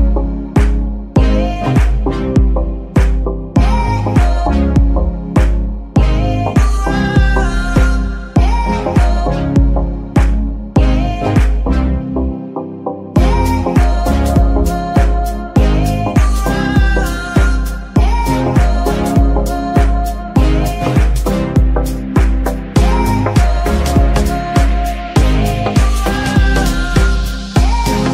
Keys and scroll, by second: 0.7 r, 0.9 x, 1.6 Escape, 3.2 g, 3.6 Escape, 7.0 g, 7.5 Escape, 11.6 ctrl+Tab, 18.3 g, 18.3 y, 20.3 Escape, 21.1 g, 22.7 Escape, 23.9 g, 24.5 Escape, 25.6 g, 26.9 Escape, 27.5 g.